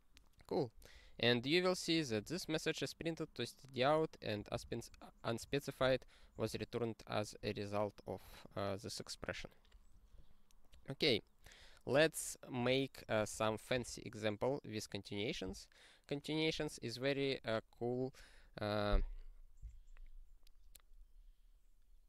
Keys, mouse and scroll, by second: 2.0 click, 2.2 click, 2.4 click, 3.9 click, 3.9 click, 4.5 ctrl+space, 4.6 ctrl+p, 5.8 ctrl+g, 6.4 super+o, 11.2 scroll down 1, 12.5 click, 13.3 ctrl+p, 13.7 ctrl+e.